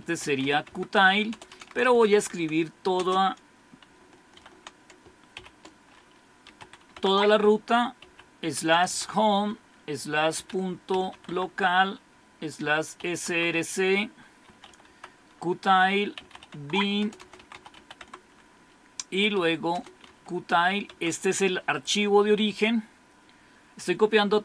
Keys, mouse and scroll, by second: 0.0-3.0 typing, 4.3-8.9 typing, 10.2-13.1 typing, 13.3 Tab, 14.3-17.8 typing, 18.0 Tab, 19.1-20.7 typing, 20.9 Tab.